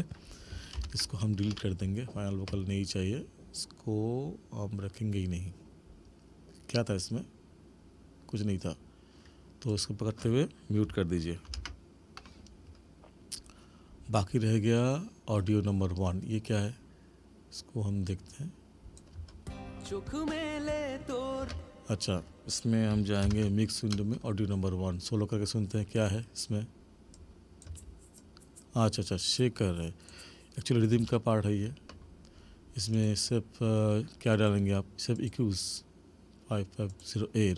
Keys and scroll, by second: 0.8 ctrl+=, 11.5 ctrl+m, 19.2 space, 21.4 space, 23.3 ctrl+=, 27.8 space, 31.0 space.